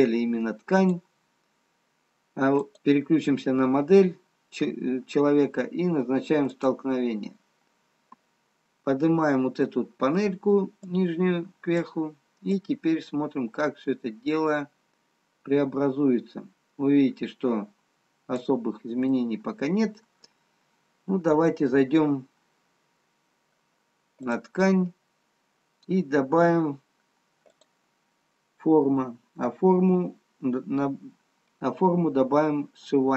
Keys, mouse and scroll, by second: 7.3 click, 11.1 click, 13.0 click, 19.2 middle click, 21.8-22.6 scroll down 2, 22.6-23.4 scroll down 3, 24.1 scroll down 1, 24.3 click, 25.2 scroll down 1.